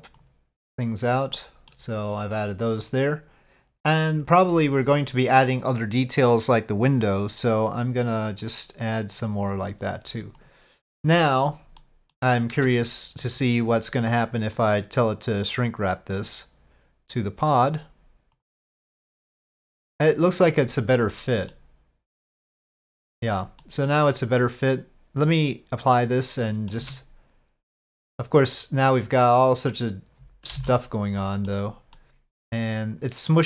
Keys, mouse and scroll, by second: 0.2 click, 1.5 middle click, 2.8 click, 7.1 click, 8.4 click, 9.2 click, 10.4 click, 11.1 middle click, 11.9 middle click, 12.6 Tab, 14.7-16.2 drag, 17.6 click, 18.9-20.3 middle drag, 21.1-21.5 middle drag, 22.1-23.0 middle drag, 23.6 middle drag, 25.3-25.9 drag, 26.4-26.7 middle drag, 26.8 Tab, 27.8-29.7 middle drag, 30.6 alt+a, 31.2 click, 32.0 click, 32.8-33.4 middle drag.